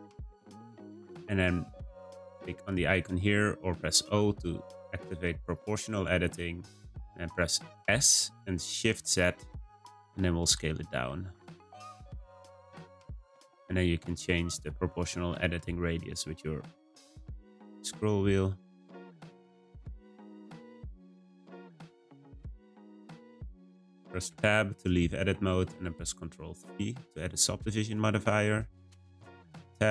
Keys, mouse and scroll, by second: 0.4 shift+click, 0.5 shift+click, 5.5 click, 7.8 s, 21.9-24.3 middle drag, 24.3 Tab, 24.9-26.4 shift+middle drag, 26.4 ctrl+3, 28.1-29.4 middle drag, 29.4 Tab.